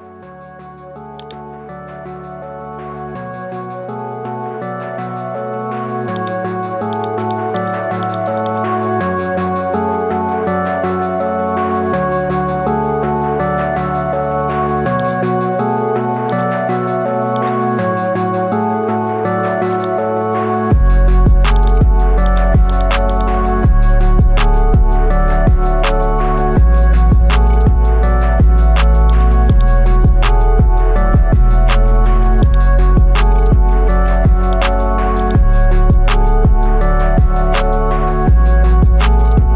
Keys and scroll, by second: 16.0 x, 21.0 x, 27.2 ctrl+alt+shift+e, 30.6 Return.